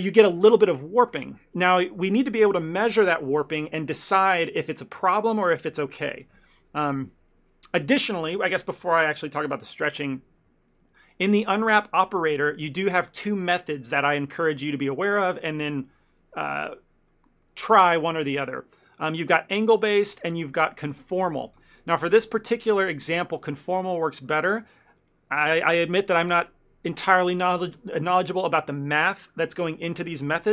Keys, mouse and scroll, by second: 7.9 click, 11.0 click, 11.8 click, 20.1 click.